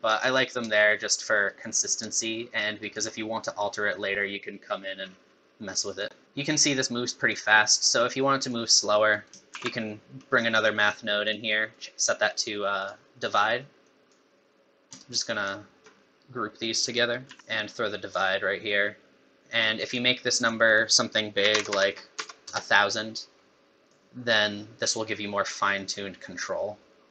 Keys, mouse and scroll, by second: 0.6 shift+click, 2.1 shift+click, 5.1 scroll down 2, 5.7 middle click, 6.2 middle click, 6.2 click, 6.2 scroll down 1, 7.6 middle click, 8.1 click, 9.1 click, 9.5 shift+d, 12.8 click, 13.8 click, 15.0 shift+right click, 17.3 click, 17.3 g, 17.5 click, 19.9 click, 20.7 click, 21.7 KP_0, 23.9 click.